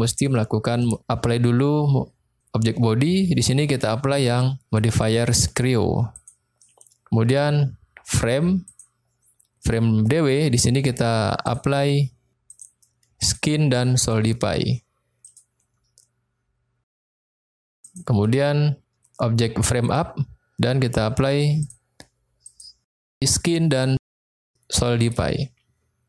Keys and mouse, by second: 0.4 middle click, 5.1-6.3 drag, 8.8 click, 11.5 drag, 12.5-13.4 drag, 14.0-15.4 drag, 16.9 click, 17.8 click, 21.6-22.6 drag, 23.7-25.2 drag.